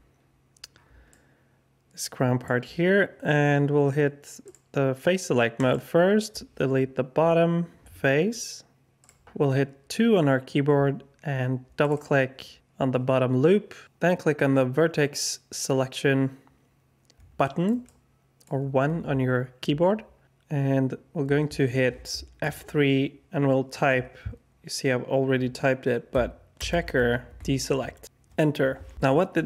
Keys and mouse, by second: 1.0-2.4 alt+drag, 4.4 click, 5.5 click, 7.1 Delete, 9.2 2, 11.8 click, 11.9 click, 17.4 alt+shift+click, 17.8 alt+click, 18.7 1, 22.4 F3, 27.4 BackSpace.